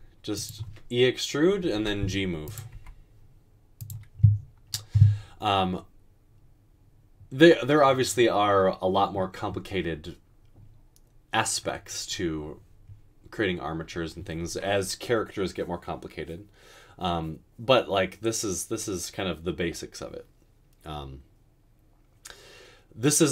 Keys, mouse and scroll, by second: 1.8-2.7 typing.